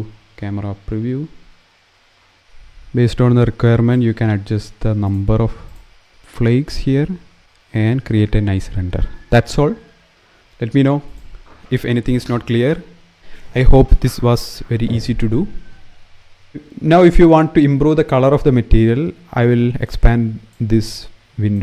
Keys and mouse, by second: 1.8 middle click, 2.4-3.6 drag, 7.2 s, 7.4 x, 10.8 ctrl+s, 17.0-21.4 drag.